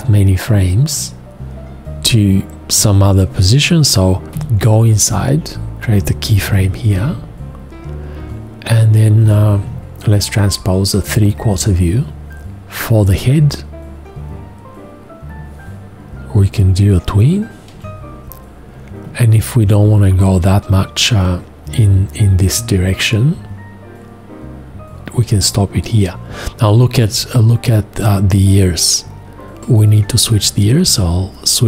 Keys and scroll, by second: 4.3 F2, 6.5 x, 17.7 4.